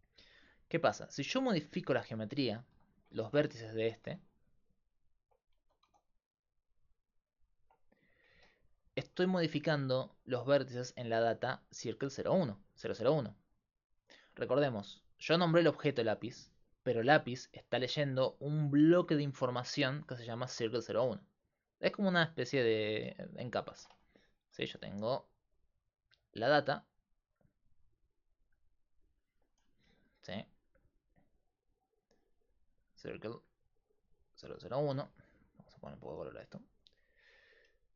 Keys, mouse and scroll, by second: 0.0-35.0 typing, 1.7 Tab, 3.2 ctrl+Tab, 4.9 click, 7.6 Tab, 15.2-17.4 right drag, 23.3-24.5 super+drag, 24.5 super+d, 25.0-25.4 super+d, 28.1-29.3 drag, 33.8-37.9 drag, 37.7-37.9 typing.